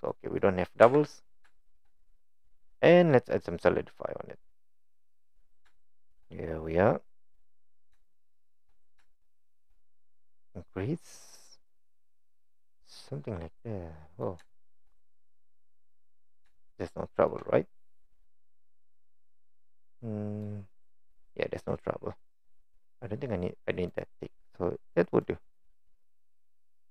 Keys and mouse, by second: 0.4 middle click, 0.8 Tab, 1.5 shift+middle drag, 1.9 click, 2.5-4.9 drag, 5.8-6.1 shift+middle drag, 6.7-7.3 middle drag, 8.1 shift+middle click, 9.1 shift+middle click, 11.8 click, 12.3 click, 13.6 middle click, 14.5 shift+middle drag, 15.0-16.0 middle drag, 16.5-17.3 shift+middle drag, 19.2-20.5 middle drag, 25.6-26.9 middle drag.